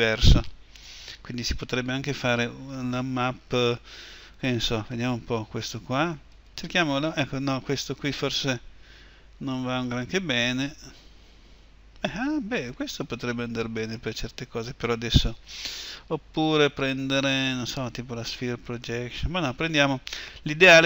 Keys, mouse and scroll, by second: 17.8 u.